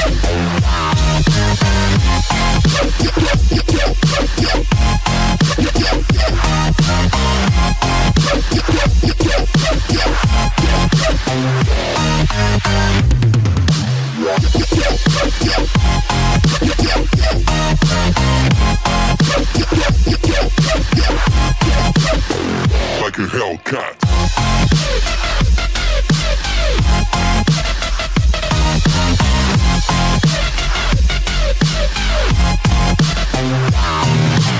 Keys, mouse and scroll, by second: 0.5-2.1 scroll down 3, 2.2 click, 2.2 scroll down 3, 4.2 click, 10.1 click, 12.8 click, 14.1 click, 19.4 click, 20.4 click, 25.3 click, 27.3 click, 28.4 click, 31.7 click, 33.0 click.